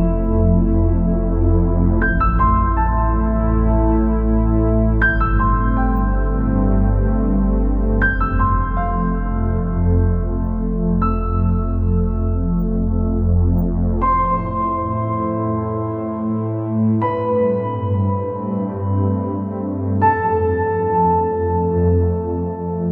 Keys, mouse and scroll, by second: 1.7-2.2 scroll up 1, 2.2 scroll down 1, 3.1 e, 10.9 scroll down 4, 12.0-13.4 drag, 13.8 scroll down 2, 13.9 middle click, 14.7-15.3 scroll up 4, 15.3 middle click, 15.7 scroll down 2, 15.8-16.9 middle drag, 16.9-17.5 scroll up 4, 17.5-20.4 middle drag, 20.4-20.8 scroll down 3, 20.8-21.1 scroll up 2, 21.1 scroll down 1, 21.2-22.9 middle drag.